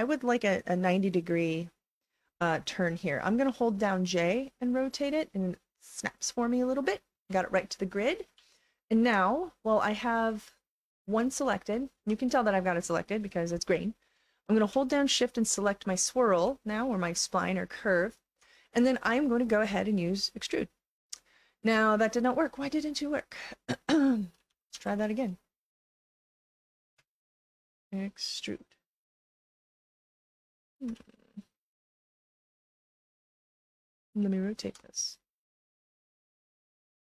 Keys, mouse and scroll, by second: 4.2-6.9 drag, 8.6 alt+click, 9.6-10.7 right drag, 10.2 click, 11.7 alt+middle click, 12.2 click, 12.2 right click, 13.7 alt+middle click, 15.0 shift+click, 16.6 alt+click, 20.3 click, 21.8-24.1 alt+drag, 24.4 ctrl+z, 24.7 ctrl+z, 25.6 click, 26.4 shift+click, 28.2 click, 30.3 ctrl+z, 31.0-34.4 alt+drag, 34.9-36.1 right drag, 36.4 click.